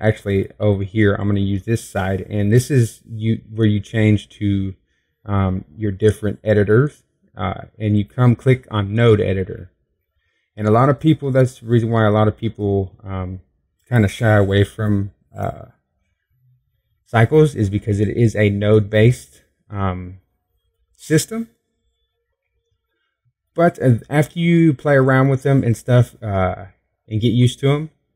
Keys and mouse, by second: 10.3 middle click, 11.8 middle click, 17.1 middle click.